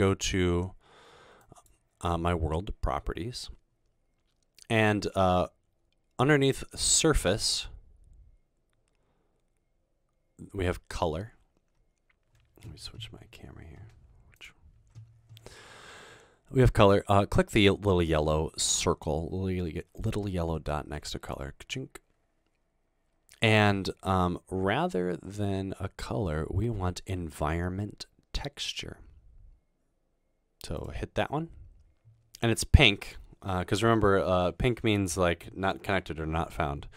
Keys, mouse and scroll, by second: 1.5 click, 21.2 click, 30.8 click.